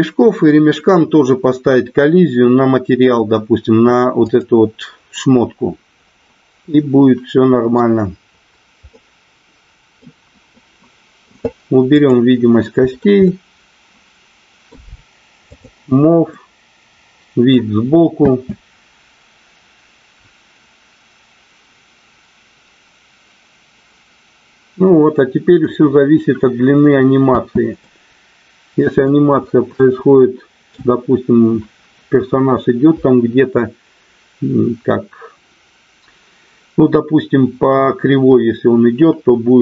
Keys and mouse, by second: 6.7-7.7 middle drag, 8.9-10.0 middle drag, 10.5 middle click, 11.9 click, 13.2-14.6 middle drag, 15.5 click, 16.3-17.4 middle drag, 18.1 space, 27.6 space, 27.7-29.0 middle drag, 29.7-30.8 middle drag.